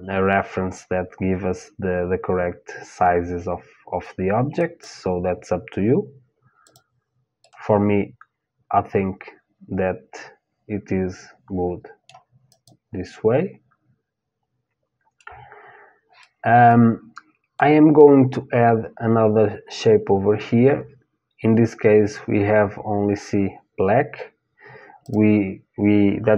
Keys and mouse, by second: 6.2-8.2 drag, 7.2 middle click, 8.2 middle click, 12.1-14.5 drag, 15.8-17.8 middle drag, 24.7-26.3 drag.